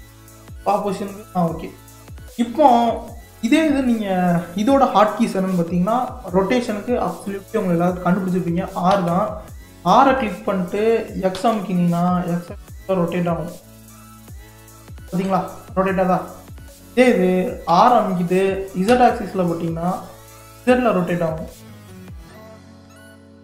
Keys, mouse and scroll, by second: 0.5 click, 0.9-2.5 middle drag, 2.5-3.0 scroll up 2, 3.0-3.5 middle drag, 3.5-3.9 scroll down 1, 3.9-4.7 middle drag, 4.7-7.2 scroll up 1, 7.2 click, 8.9 r, 17.7 r.